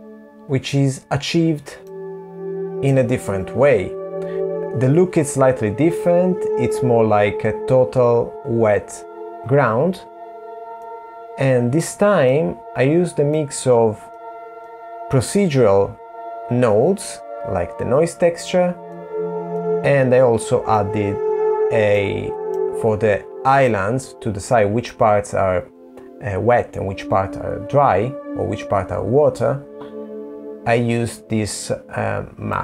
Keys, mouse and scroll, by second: 1.2 middle click, 9.2 middle click, 9.2-9.6 scroll down 10, 11.7 middle click, 13.0 middle click, 16.7 middle click, 17.9 middle click, 19.6-20.4 scroll up 10, 20.4 middle click, 29.1-31.0 scroll up 3, 31.0 click.